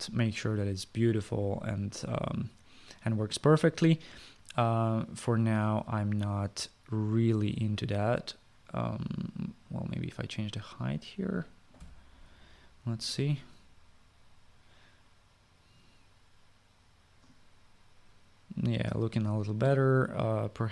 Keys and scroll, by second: 12.4 5.